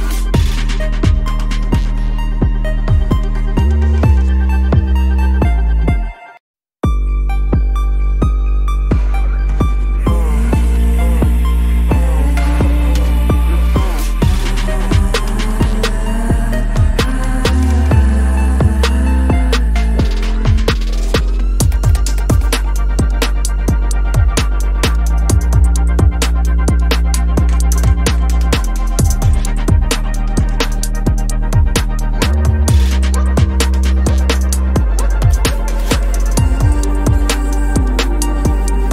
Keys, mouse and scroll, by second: 0.0 ctrl+-, 0.3 ctrl+-, 0.4 ctrl+=, 0.6 ctrl+=, 0.6 space, 1.6 space, 2.3 space, 2.5 double click, 3.4 right click, 4.5 Return, 4.9 ctrl+-, 5.1 ctrl+-, 5.3 ctrl+-, 7.2 alt+click, 7.9 space, 9.2 double click, 10.7 ctrl+c, 10.7 typing, 13.4 double click, 14.4-15.2 typing, 17.6 ctrl+-, 17.9 ctrl+-, 22.0 ctrl+=, 22.3 ctrl+=, 22.7 space, 24.1 ctrl+-, 25.5 ctrl+=, 25.9 ctrl+=, 26.1 ctrl+=, 26.5 space, 27.7 ctrl+=, 28.0 space, 28.7 ctrl+=, 29.1 p, 31.0 double click, 31.2 space, 31.4 ctrl+=, 31.4 space, 31.6 ctrl+-, 32.2 alt+click, 32.8 ctrl+=, 32.9 space, 34.0 ctrl+z, 34.7 ctrl+-, 34.8 space, 35.4 space, 36.4 shift+click, 36.7 ctrl+z, 37.2 space, 38.0 space.